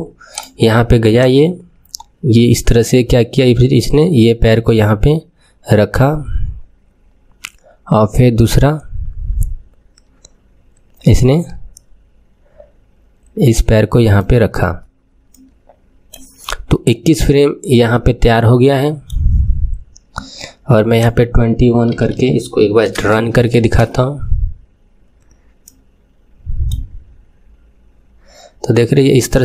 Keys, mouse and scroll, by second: 0.3-4.1 drag, 15.3-20.9 middle drag, 20.9-22.9 drag, 23.6 space, 25.6-28.6 middle drag.